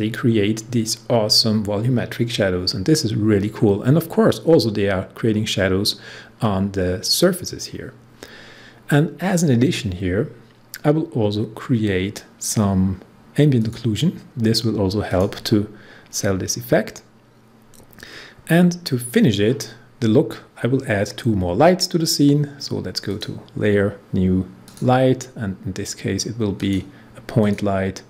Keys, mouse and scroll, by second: 13.6 click, 23.0-28.0 drag.